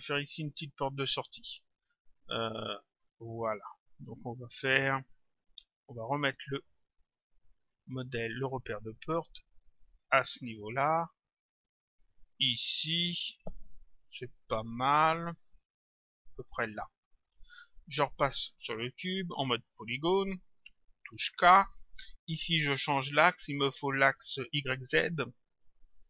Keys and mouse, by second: 2.5 click, 4.0 click, 5.5 click, 7.4 click, 11.5 click, 18.6 click, 19.8 click, 21.2 k, 24.6 click, 25.9 click.